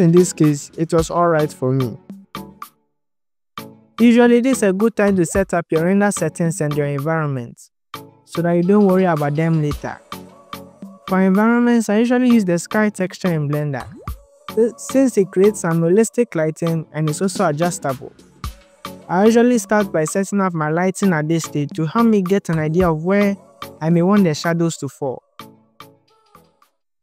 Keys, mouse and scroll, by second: 0.0 click, 1.1-1.7 drag, 1.9-2.4 drag, 2.9 click, 3.3 click, 3.5 click, 3.8 click, 4.5 KP_0, 5.6 click, 6.3 KP_0, 6.9-7.5 scroll down 2, 7.5 click, 7.9 click, 8.3 click, 9.9-12.9 drag, 10.1-11.8 scroll down 5, 13.9 click, 14.4 click, 15.3 click, 16.2 ctrl+s, 16.9 click, 17.2-17.6 scroll down 3, 17.9-19.0 drag, 19.5 click, 22.5 click, 24.7-27.0 shift+drag.